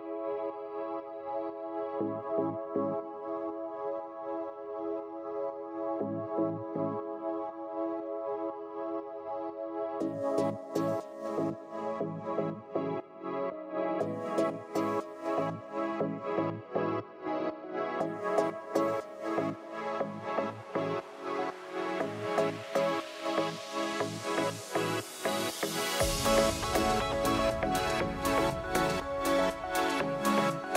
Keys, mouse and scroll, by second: 5.2 click, 5.8 F2, 7.3 click, 7.5 F1, 8.3 click, 9.1 ctrl+d, 11.7 shift+click, 13.7 ctrl+-, 15.5 click, 16.7 ctrl+d, 17.7 shift+click, 18.8 ctrl+-, 20.4 click, 21.5 click, 22.7 ctrl+d, 24.6 click, 28.2 ctrl+9, 28.6 ctrl+9, 28.8 ctrl+9, 28.9 ctrl+9, 29.1 ctrl+9, 29.2 ctrl+9, 29.4 ctrl+9, 29.6 ctrl+9, 29.8 ctrl+9, 30.4 ctrl+9.